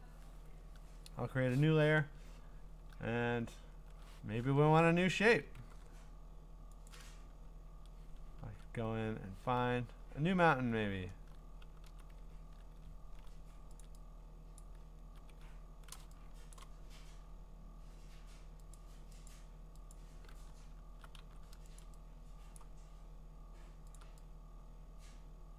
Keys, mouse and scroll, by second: 2.9 middle click, 3.0 middle click, 3.0-3.6 scroll, 4.4 ctrl+Tab, 5.6 ctrl+w, 6.9 click, 8.4 ctrl+Tab, 9.5-10.1 ctrl+scroll, 10.3 scroll down 6, 10.4 scroll down 4, 10.8-11.2 scroll up 7, 12.3 ctrl+scroll up 2, 12.7-13.3 ctrl+scroll, 13.8 click, 14.6 ctrl+click, 15.5 scroll, 16.5 click, 16.6 click, 16.7 click, 17.2-17.8 scroll, 18.8 click, 19.3 click, 19.9 click, 20.6-21.2 scroll, 21.2 v, 21.8 ctrl+click, 22.6 click, 24.0 click.